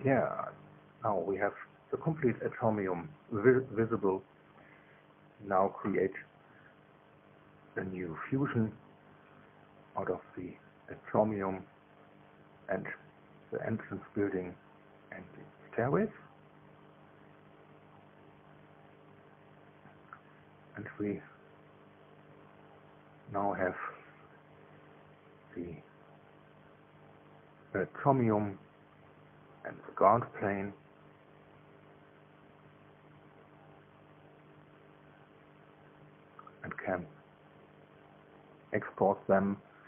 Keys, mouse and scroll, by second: 0.0 space, 8.7 ctrl+click, 9.6 ctrl+click, 10.1 ctrl+click, 10.7 ctrl+click, 14.9 click, 18.7 click, 19.7 shift+click, 20.6 shift+middle click, 21.5-22.6 shift+drag, 22.7 shift+click, 23.3-25.7 drag, 32.6 shift+click, 33.3-36.5 shift+drag.